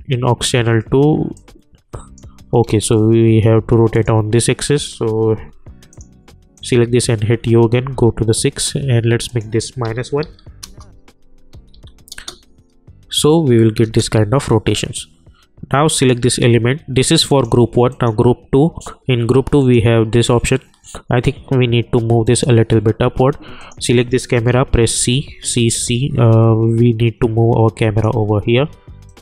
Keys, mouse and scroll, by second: 1.3-2.6 drag, 2.6 ctrl+z, 3.9 click, 5.3 u, 5.9 click, 6.8-8.3 typing, 9.3 click, 9.8 -, 10.6 Return, 11.5 j, 11.7 j, 12.1 space, 14.1 j, 16.0-23.6 drag, 24.6 c, 25.1 c, 25.4 c, 25.8 c, 26.4-29.2 drag.